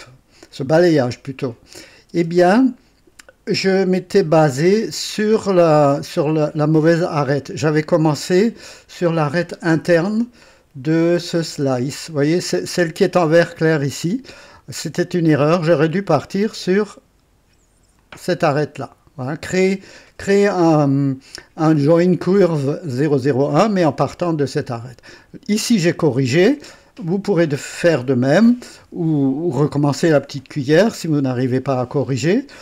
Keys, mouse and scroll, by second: 2.1 space, 9.0-9.9 scroll up 2, 11.0 click, 11.5 space, 13.5 scroll up 1, 17.9 click, 19.9 scroll down 1, 20.5 scroll down 1, 21.1 scroll down 1, 25.5 click, 28.4 scroll down 2, 30.6-31.0 scroll down 1, 31.3 right click, 32.2-32.6 scroll down 1.